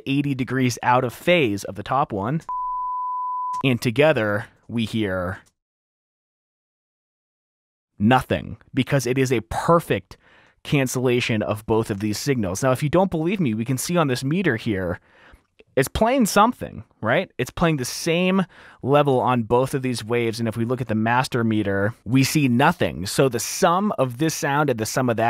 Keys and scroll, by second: 2.5 space, 3.8 space, 4.9 s, 5.6 space, 21.7 space.